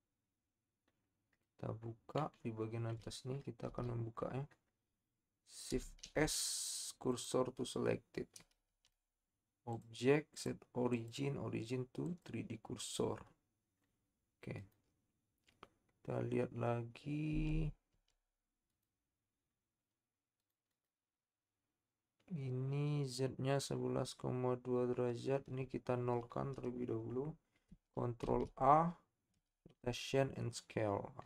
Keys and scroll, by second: 6.0 shift+s, 8.7 Tab, 17.4 Tab, 17.9 Tab, 28.2 ctrl+a.